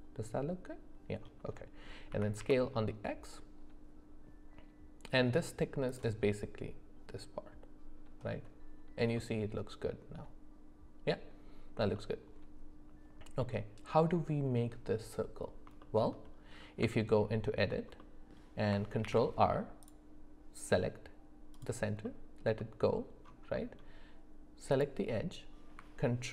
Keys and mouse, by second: 2.1 s, 9.2-11.3 middle drag, 11.9-13.4 middle drag, 15.8 shift+middle click, 16.8 Tab, 18.0 middle click, 19.0 ctrl+r, 22.0 middle click, 22.6 shift+middle click, 23.5 middle click.